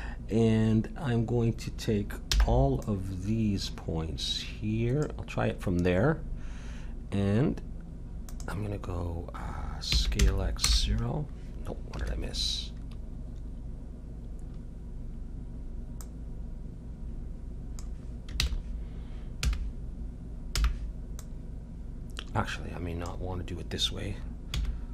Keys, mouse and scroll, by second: 2.2 b, 8.3-10.1 drag, 9.9 s, 16.0-17.8 drag, 18.4 ctrl+z, 19.4 a, 20.6 b, 24.6 s.